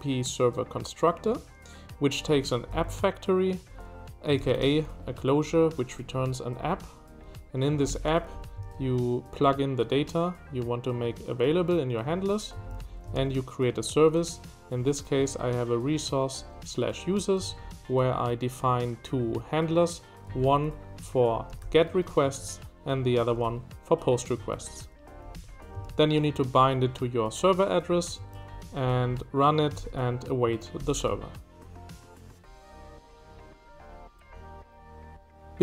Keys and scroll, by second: 2.8 Escape, 3.7 j, 4.7 j, 4.8 j, 7.7 Escape, 7.7-9.1 typing, 12.5 Escape, 12.8 j, 15.1 Escape, 15.4-16.9 typing, 20.3-26.3 typing, 28.2 Escape, 28.5 j, 29.8 shift+v, 30.9 shift+v.